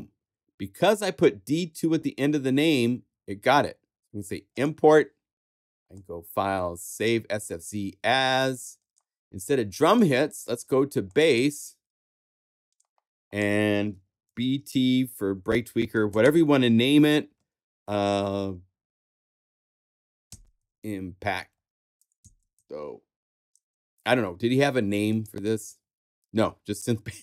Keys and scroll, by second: 14.2 shift+b, 14.5 shift+t, 15.7 space, 20.0-23.0 typing.